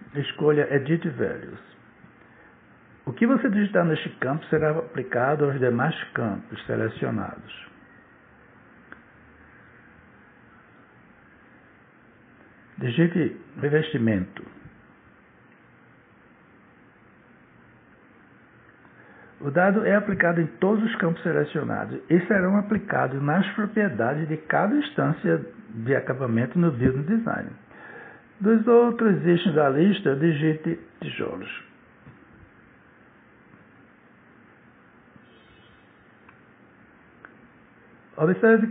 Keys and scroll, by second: 7.3-10.1 typing, 11.5 BackSpace, 13.2 shift+r, 13.7 e, 14.9-16.5 typing, 18.7 Return, 31.1 shift+t, 32.2 i, 33.0 o, 34.5 l, 34.8 o, 35.7 Return.